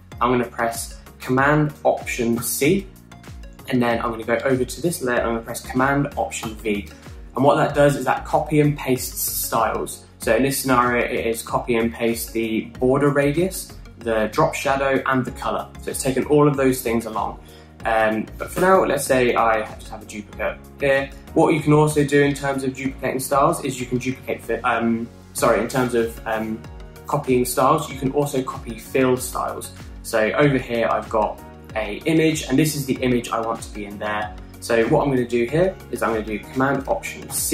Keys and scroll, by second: 3.2 alt+super+c, 7.3 alt+super+v, 19.5 BackSpace, 20.2 super+d, 24.2 alt+Left, 24.3 alt+Left, 24.4 alt+Left.